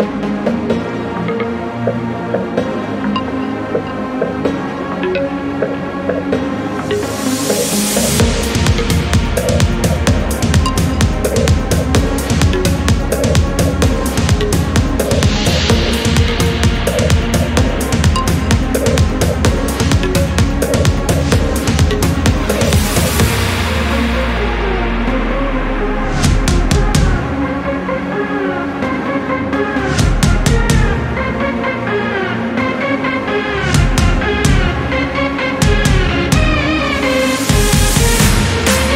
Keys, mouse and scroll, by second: 0.3 click, 0.7 Return, 1.1 click, 1.4 Return, 11.3 click, 14.6 click, 19.3 click, 21.9 click, 23.7 ctrl+click, 25.1 click, 28.3 scroll up 1, 30.6 click, 34.4-34.7 scroll up 1, 36.2 click, 36.8 scroll down 1, 38.2-38.5 scroll down 2.